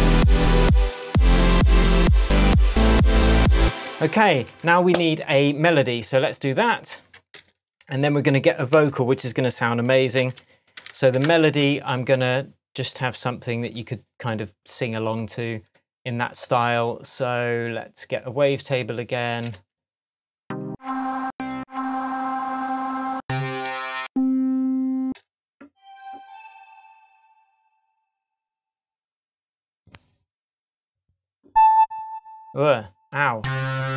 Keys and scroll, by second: 3.5 space, 4.4 super+space, 4.5 super+s, 7.4 shift+super+t, 8.7 super+r, 9.4 shift+super+r, 10.0-11.1 typing, 19.3 Left, 20.6 Down, 23.7 Up, 25.0 space.